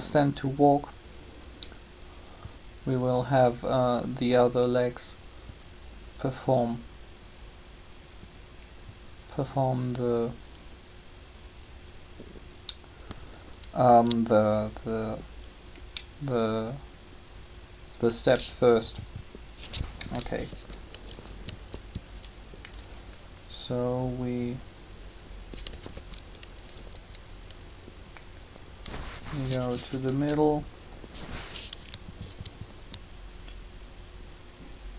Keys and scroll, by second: 20.5 Up, 25.7 Down, 29.9 Up.